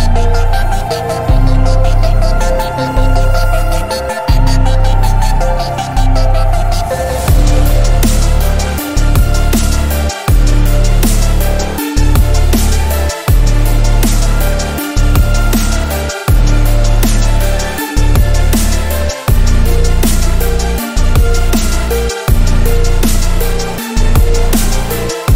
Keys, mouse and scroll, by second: 0.1-1.1 alt+right drag, 1.5 click, 9.4-9.8 alt+scroll down 1, 9.8 alt+scroll up 1, 9.9 space, 9.9 click, 9.9-10.3 click, 10.3 alt+scroll down 1, 10.7 alt+scroll up 1, 10.7-11.2 click, 12.4 ctrl+d, 16.0 right click, 16.5 click, 17.5 space, 17.6 click, 17.9 space, 18.4 click, 20.9 alt+Num_Lock, 21.0 alt+scroll up 1, 21.7-22.1 alt+scroll down 1, 22.1 space, 22.2 click, 22.3 space, 23.7 space, 23.8-24.4 click, 24.1 space.